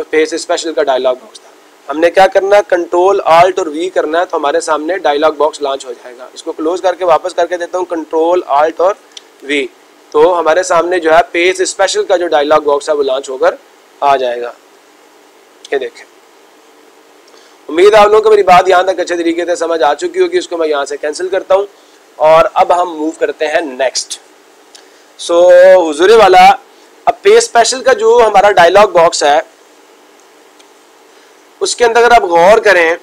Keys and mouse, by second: 6.1 click, 13.0 ctrl+click, 17.9-19.0 ctrl+drag, 20.1 click.